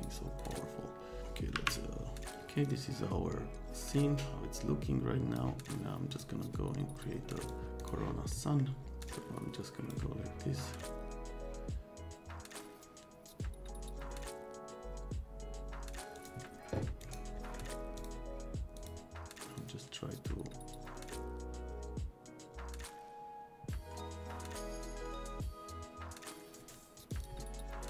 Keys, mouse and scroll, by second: 0.0 click, 0.4 click, 2.2-3.6 middle drag, 3.6-5.3 drag, 6.1 click, 7.5 click, 7.8 click, 8.3 middle click, 9.0 click, 16.1 click, 17.0 right click, 17.5 right click, 17.9 click, 18.7 click, 19.6-26.6 drag, 27.0 click, 27.1 middle click, 27.2 click, 27.8 click.